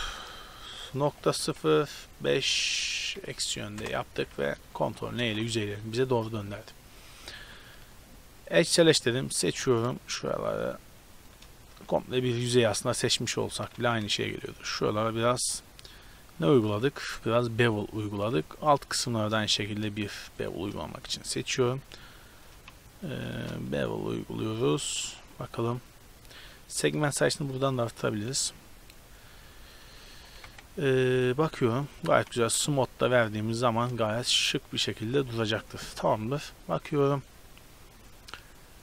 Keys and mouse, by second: 4.2 a, 4.4 a, 5.2 ctrl+n, 5.6 a, 6.1 middle click, 6.6-7.7 middle drag, 9.4 click, 9.4 right click, 11.6-13.8 middle drag, 13.8 ctrl+b, 17.4 middle click, 18.0 a, 18.6 right click, 19.4-21.1 middle drag, 21.3 middle click, 21.5 middle click, 22.0 middle click, 22.2 click, 23.4 ctrl+b, 27.5-29.0 drag, 29.0-30.5 middle drag, 30.5 KP_Decimal, 31.3 Tab, 33.1-33.6 right drag, 33.8-34.2 right drag, 35.4 middle click, 35.5 a, 35.7 middle click.